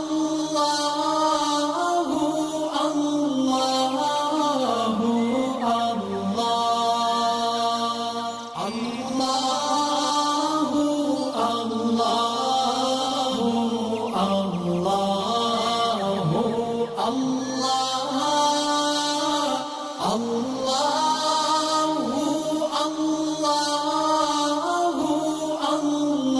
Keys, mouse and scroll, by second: 0.8-2.8 drag, 2.8-5.5 alt+drag, 5.5 click, 8.0 alt+scroll down 1, 8.8 space, 9.0 click, 10.1 alt+scroll up 1, 10.5 space, 10.6-11.5 click, 11.0 space, 12.8-13.9 alt+drag, 15.1 alt+scroll down 1, 15.6 space, 15.8 click, 16.2 alt+scroll up 1, 16.7 space, 16.8-18.2 click, 17.1 space.